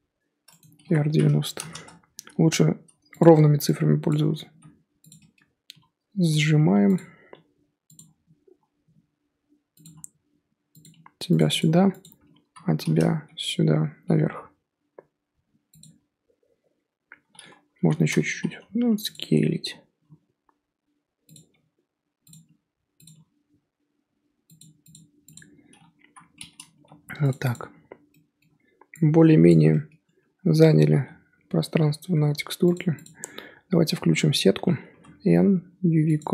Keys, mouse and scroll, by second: 0.8 r, 2.4 g, 4.1 click, 4.5 g, 5.7 s, 7.3 g, 9.8 s, 10.9 g, 12.0 click, 12.4 l, 14.0 g, 17.8 l, 18.3 s, 19.1 g, 21.5 g, 22.4 s, 23.1 g, 25.3 click, 26.0 l, 26.7 g, 27.5 click, 30.9 g, 33.0 click, 34.9 n, 36.1 click.